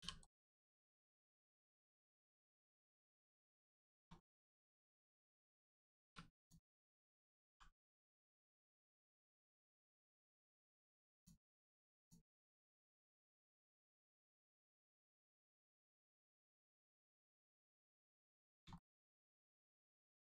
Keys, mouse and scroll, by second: 0.1 right click, 1.9 click, 3.1 shift+middle click, 4.1 scroll up 1, 4.9 click, 7.4 g, 8.1 right click, 8.5 click, 11.1 click, 13.4 click, 15.3 middle click, 16.7 scroll down 1, 18.0 middle click, 18.3 scroll down 1, 18.7 shift+middle click, 19.5 scroll up 1.